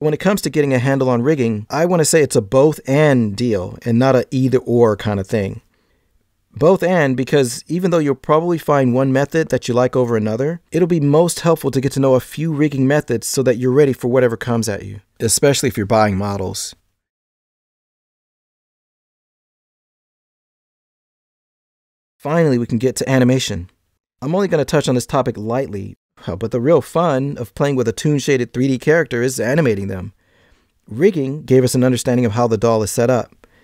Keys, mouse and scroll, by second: 9.6 e, 10.5 click, 10.6 g, 10.9 e, 11.5 click, 11.8 scroll down 2, 12.0 shift+middle click, 13.0 right click, 13.3 g, 13.7 shift+middle click.